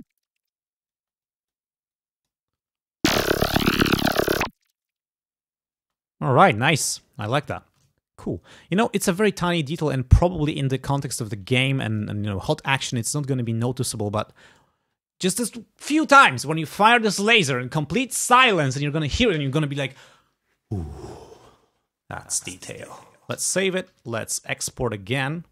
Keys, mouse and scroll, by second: 0.0 click, 1.0 space, 1.3 click, 2.0 click, 2.6 space, 6.0 space, 6.4 click, 8.1 ctrl+scroll down 2, 8.8 ctrl+scroll down 2, 11.6 click, 12.9 click, 13.3 ctrl+scroll up 2, 13.8 ctrl+scroll down 2, 14.2 ctrl+scroll up 2.